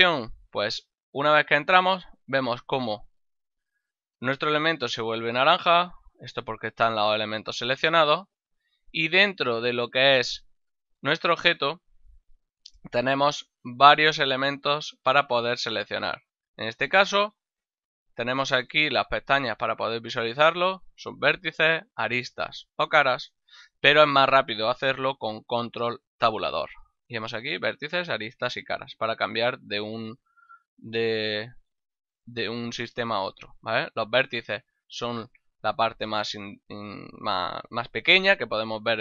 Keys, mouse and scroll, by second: 1.5 click, 3.1 ctrl+middle click, 4.3 shift+middle click, 5.8 a, 10.0 shift+middle click, 11.3 middle click, 13.4 right click, 14.6 right click, 26.0 ctrl+Tab, 29.2 click, 29.9 right click, 30.7 ctrl+Tab, 31.2 click, 31.8 right click, 34.3 ctrl+Tab, 34.9 click, 35.2 right click, 36.2 g, 36.8 right click.